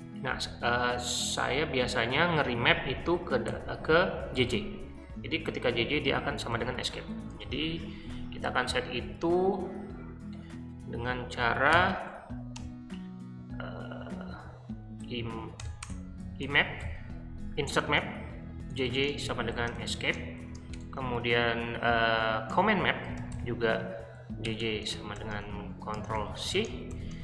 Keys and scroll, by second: 3.4-4.5 typing, 6.5 Escape, 6.9-7.6 typing, 11.7 i, 12.6 BackSpace, 15.0-20.9 typing, 22.5-27.2 typing.